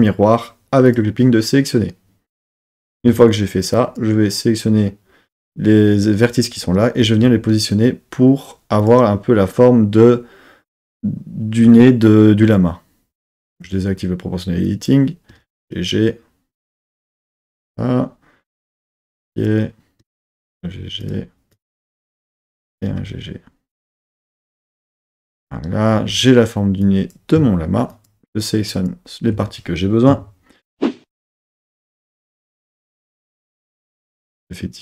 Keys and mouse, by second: 0.8 click, 2.4 Tab, 3.1 1, 3.8 click, 7.0 g, 7.1 g, 8.8-10.2 drag, 13.5 click, 14.7 click, 15.3 g, 15.5 g, 17.3 click, 19.3 click, 20.0 g, 20.2 g, 21.0 click, 21.6 click, 22.4 click, 22.7 g, 22.9 g, 24.7 click, 26.0 3, 26.8 click, 27.9 shift+click, 28.8 shift+click, 30.1 KP_3, 33.8 KP_1.